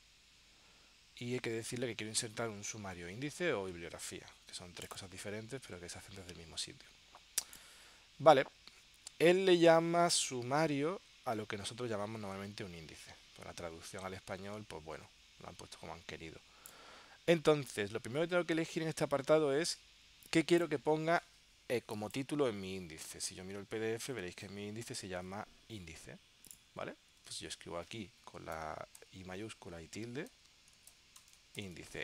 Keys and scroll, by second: 23.0 super+Tab, 27.4 super+Tab, 29.2 shift+i.